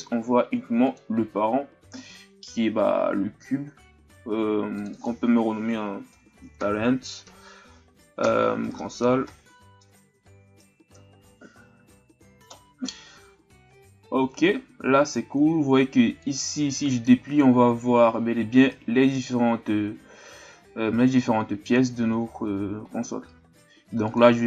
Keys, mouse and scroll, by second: 0.8 click, 4.8 click, 4.9-8.0 drag, 16.2 click, 24.0 click.